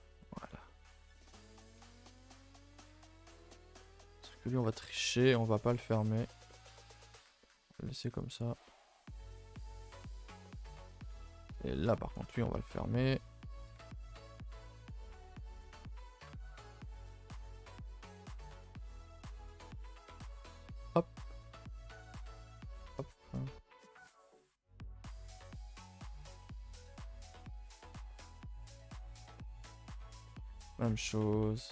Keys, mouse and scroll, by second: 0.5 x, 0.6-1.8 middle drag, 1.8 scroll up 2, 2.0 2, 2.5 alt+Left, 2.9 s, 3.7 shift+middle click, 4.5 g, 5.1 middle click, 5.8 g, 6.4 middle click, 6.9 s, 7.4 middle click, 7.7 g, 8.3 a, 8.4 a, 8.6 middle click, 8.9 scroll down 1, 9.2 Tab, 9.5 middle click, 9.7-10.0 scroll down 2, 10.0 middle click, 10.6-11.1 scroll up 2, 11.1 Tab, 11.3 middle drag, 11.5 scroll up 2, 11.8-12.1 middle drag, 12.1 scroll down 2, 12.3 shift+middle drag, 12.5-12.8 scroll up 2, 13.2 alt+click, 13.9 alt+click, 14.1-14.7 shift+middle drag, 14.7 g, 15.9-19.1 typing, 21.2 k, 26.3 k, 27.9-28.2 scroll down 1, 28.2 a, 28.3 a, 28.5 scroll down 2, 28.8 middle click, 29.7 scroll down 1, 30.0 a, 30.1 a, 30.2 middle click, 30.7 ctrl+r.